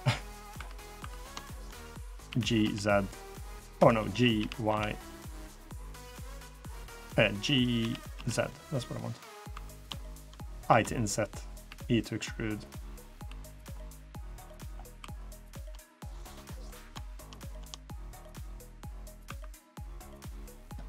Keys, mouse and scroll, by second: 0.3 3, 0.7 2, 0.9 click, 1.2 click, 2.0 g, 4.1 g, 7.5 g, 9.3 3, 9.5 click, 9.8 shift+click, 10.4 i, 11.4 e, 12.7 middle click, 13.0 2, 13.3 click, 13.5 middle click, 14.2 middle click, 14.7 2, 14.9 click, 15.3 shift+click, 16.4 click, 17.1 click, 17.2 shift+click, 17.7 click, 17.8 shift+click, 18.6 scroll up 1, 18.6 middle click, 19.0 3, 19.3 click, 19.6 middle click.